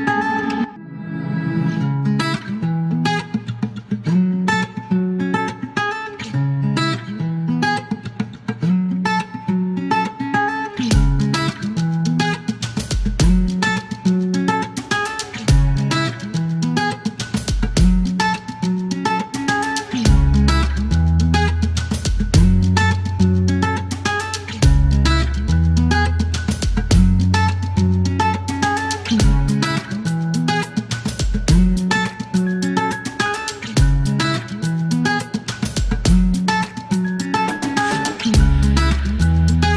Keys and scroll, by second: 0.3-1.6 typing, 3.9 alt+k, 5.0 space, 6.3 space, 7.8-10.5 typing, 11.0 alt+k, 11.6 typing, 12.9-13.5 typing, 16.0 space, 19.3-20.0 typing, 21.8-22.5 typing, 25.4-28.4 typing, 30.2-30.9 typing, 31.9 space, 34.0 typing, 34.7 alt+k, 34.8 alt+k, 35.4 space, 36.5 alt+e.